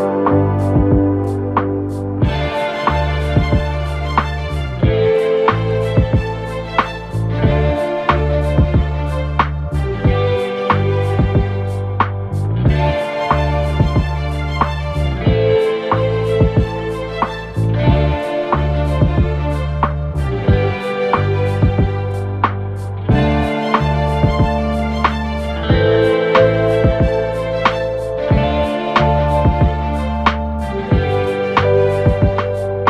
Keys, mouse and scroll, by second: 0.4 2, 0.7-1.5 scroll up 2, 1.5 shift+click, 2.4 f, 3.8 ctrl+r, 5.4 1, 5.8 click, 6.9 g, 10.1 ctrl+r, 12.0 KP_3, 13.2 click, 14.8-15.5 scroll down 2, 15.5 KP_1, 16.1-16.6 scroll up 2, 16.6 2, 17.3 drag, 18.4 shift+click, 19.2 f, 19.8 click, 20.6 f, 21.0 f, 23.0 drag, 24.1 shift+click, 24.5 f, 25.3 click, 25.7 f, 26.1 f, 26.5 f, 27.0-27.8 scroll down 4, 27.8-28.2 scroll up 2, 28.2 1, 28.7 click, 29.0-29.6 scroll down 1, 29.6 e, 31.4 2, 31.8 click, 32.6 f.